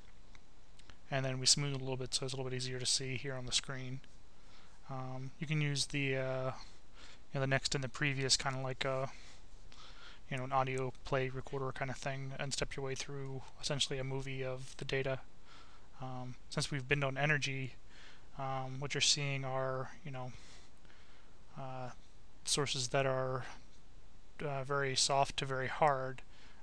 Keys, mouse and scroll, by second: 0.0 click, 2.9 click, 7.7 click, 10.8 click, 13.4 click, 18.5 click, 20.7 click, 22.1 click, 23.4 click, 25.7-26.6 drag.